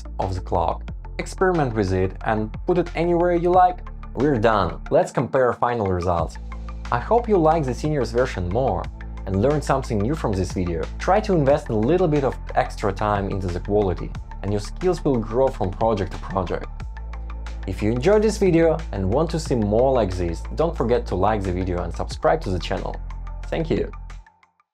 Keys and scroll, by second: 0.5 Escape, 0.7 Escape, 0.8 super+z, 1.0 shift+Down.